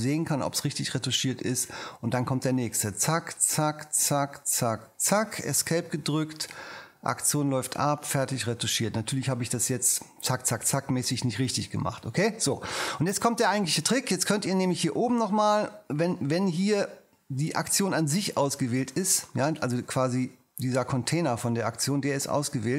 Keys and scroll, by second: 5.7 ⟲.